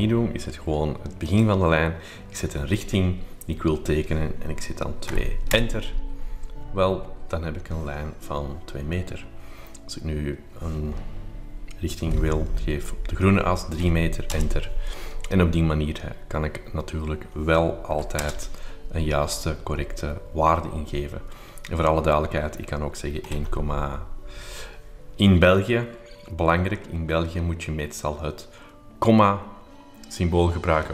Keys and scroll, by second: 5.1 2, 5.5 Return, 13.8 3, 14.3 Return, 17.9 1, 18.2 Return, 23.0-24.0 typing.